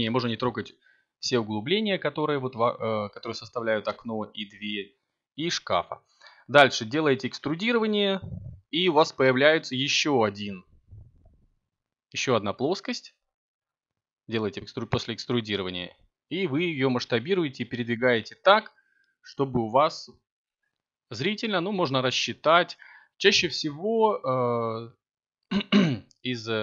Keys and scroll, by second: 12.6 7.